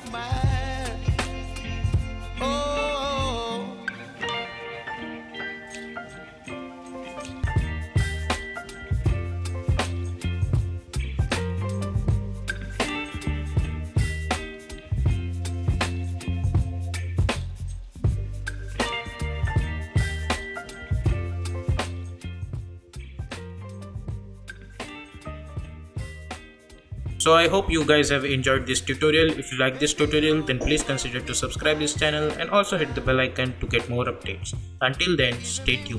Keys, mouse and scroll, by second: 2.8 space, 4.1 click, 5.0-6.5 typing, 7.5 click, 8.7 space, 11.3 space, 11.9 n, 12.1 space, 19.8 space, 20.8 click, 21.1 u.